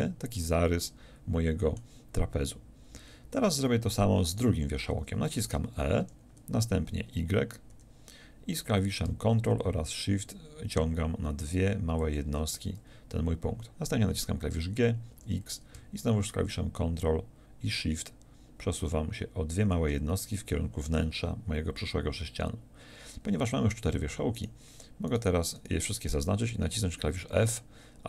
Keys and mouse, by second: 6.0 e, 14.6 g, 19.7-28.0 drag.